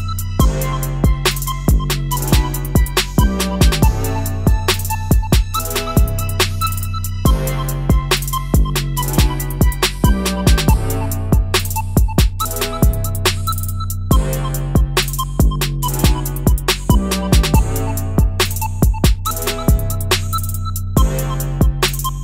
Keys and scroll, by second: 1.4 x, 18.4 ctrl+c, 18.8 ctrl+shift+v.